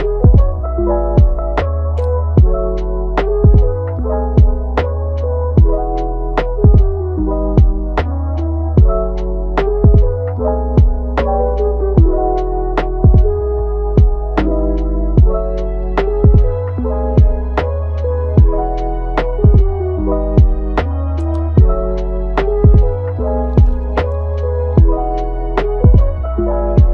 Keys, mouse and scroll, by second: 0.3-1.7 scroll up 1, 1.7 Tab, 2.5 a, 3.1-5.2 right drag, 5.2 scroll down 3, 5.4 middle click, 6.1 Tab, 6.9 click, 8.1 click, 9.0-11.2 drag, 13.2-13.9 scroll down 1, 13.9 click, 15.0 g, 17.2-17.6 scroll up 2, 17.6 middle click, 18.0 g, 19.8 g, 24.0 click, 25.7 click, 25.9 g.